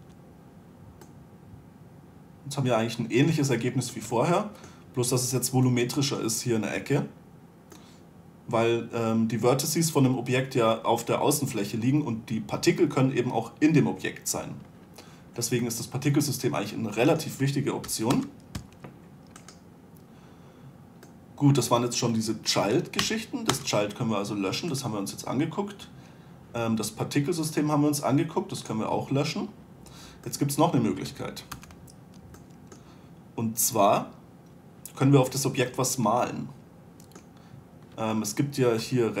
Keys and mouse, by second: 0.3 2, 6.4 middle click, 18.2 Delete, 18.9 1, 19.8-21.4 right drag, 23.4 Delete, 30.6-31.9 middle drag, 31.9 z.